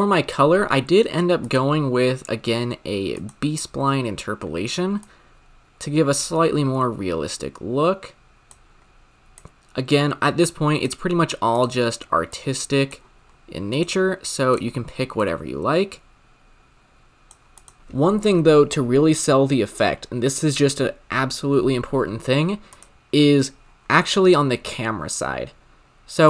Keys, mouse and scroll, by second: 1.5-3.9 drag, 3.9-5.0 scroll up 2, 5.0-8.1 drag, 9.3-11.7 drag, 13.7 click, 17.5 click, 22.8 click.